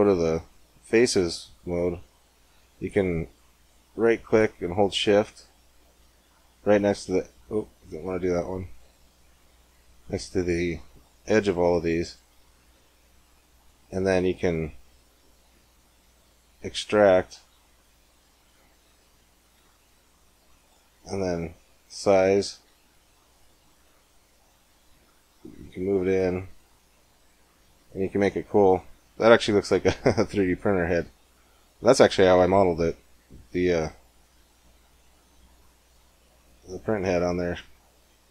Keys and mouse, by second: 1.3-3.2 drag, 3.2-5.1 right drag, 5.1 middle click, 5.7-13.5 right drag, 13.5-15.2 middle drag, 15.2 click, 15.3 middle click, 16.4 e, 21.2 s, 27.1 Tab, 31.6-33.4 middle drag, 32.6 KP_1, 33.5 KP_5, 37.6-38.3 middle drag.